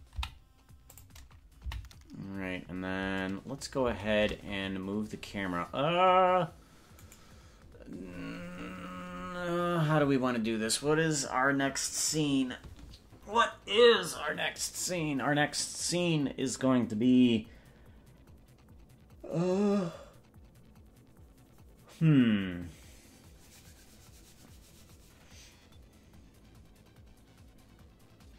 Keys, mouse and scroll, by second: 0.2 i, 1.8 Right, 4.2 shift+`, 8.2-9.8 scroll down 27, 9.6 scroll up 1.